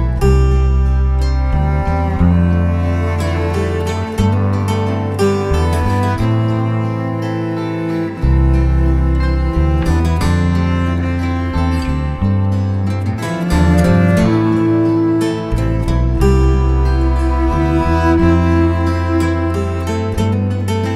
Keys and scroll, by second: 3.3 1, 3.5 Return, 10.2 space, 13.8 Escape, 16.1 space.